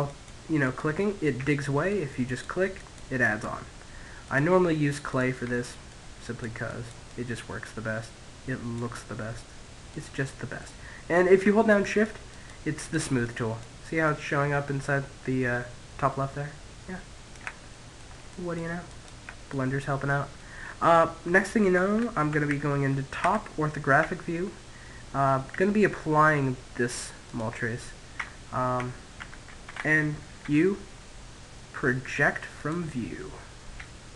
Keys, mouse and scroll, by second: 0.1-1.7 middle drag, 3.9-5.8 middle drag, 4.6-7.2 drag, 7.5-10.5 middle drag, 10.1-14.4 drag, 16.1 middle click, 16.7-19.2 drag, 18.9-20.5 middle drag, 20.7 KP_7, 21.6 KP_5, 22.4 Tab, 24.2 Tab, 24.5 Tab, 25.7 click, 26.5 Tab, 27.1 Tab, 27.4 Tab, 28.8 u, 32.6 s.